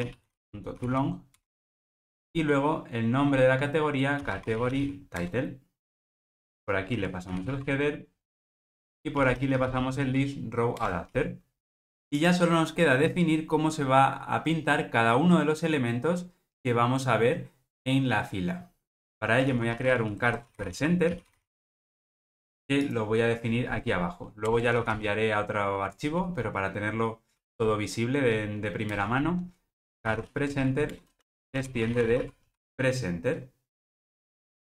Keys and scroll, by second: 8.4 Return, 29.0 Return.